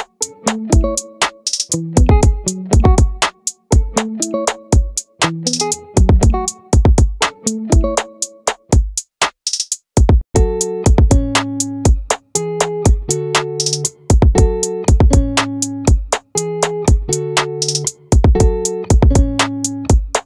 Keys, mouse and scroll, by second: 1.2-2.8 drag, 2.8 right click, 3.4-4.8 drag, 4.8-11.2 middle drag, 16.2 ctrl+r.